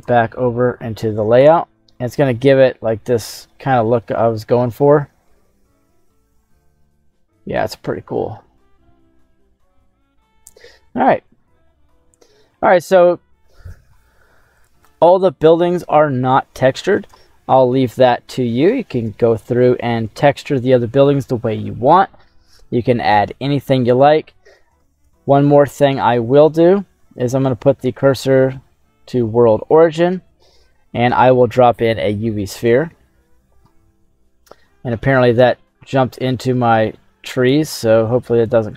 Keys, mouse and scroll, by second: 0.0 click, 1.5 /, 2.6-3.5 scroll up 4, 3.5 middle click, 4.1 scroll up 2, 6.4 scroll up 2, 7.8 scroll down 2, 8.6-9.3 scroll up 2, 9.7 scroll up 1, 10.6-11.2 scroll down 2, 11.6-12.9 middle drag, 16.1 middle click, 17.1 shift+middle click, 18.0-19.0 ctrl+middle drag, 19.1 shift+middle click, 20.5 click, 20.5 middle click, 23.7-24.0 scroll down 2, 24.3 middle click, 24.9 shift+s, 26.6 middle click, 27.8 shift+KP_7, 28.5-28.8 scroll down 2, 30.1 shift+a, 37.7-38.4 scroll down 2, 38.4-38.7 drag.